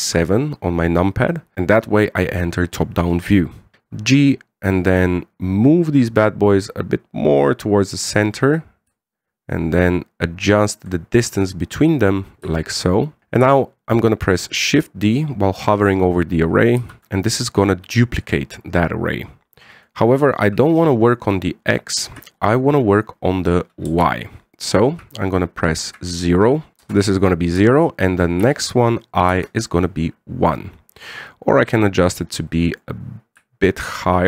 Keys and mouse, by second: 0.6 KP_7, 1.6 shift+middle drag, 4.2 g, 9.7-11.6 shift+drag, 13.5 click, 17.6 shift+d, 20.5-31.0 drag, 32.1-33.6 drag, 34.1-34.2 shift+drag.